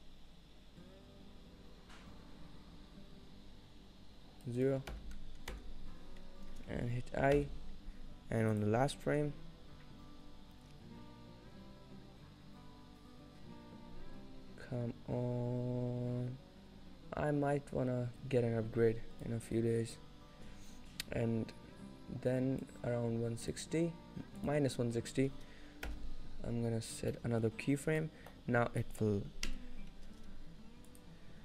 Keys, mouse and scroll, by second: 4.7 click, 7.4 i, 8.6 click, 19.3 click, 22.3 click, 27.2 middle click, 27.6-28.1 scroll up 1, 28.1 middle click, 28.4-29.5 scroll down 3, 28.9 middle click, 29.5 KP_0.